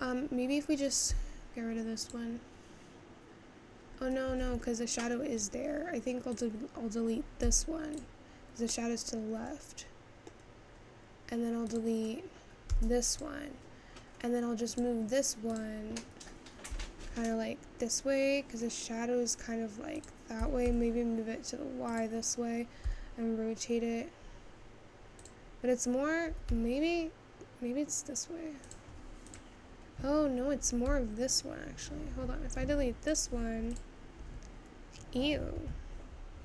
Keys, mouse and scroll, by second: 0.5-3.6 middle drag, 3.6 x, 5.6 click, 6.4-8.2 drag, 8.2 x, 9.3-12.9 middle drag, 12.9 x, 14.0-15.5 scroll down 1, 15.6-16.7 drag, 17.2 r, 29.6 click, 31.0 g.